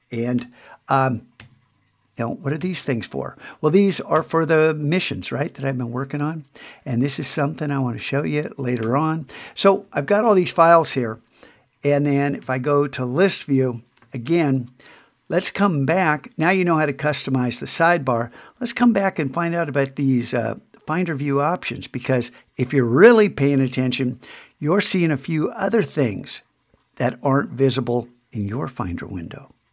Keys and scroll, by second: 12.4 super+2.